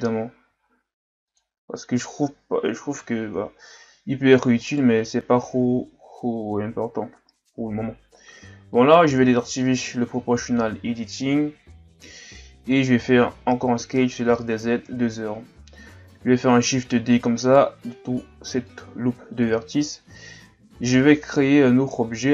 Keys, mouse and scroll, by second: 0.5 x, 3.0 KP_3, 4.6 alt+right click, 9.5 click, 13.2 s, 16.8 shift+d, 18.6 click.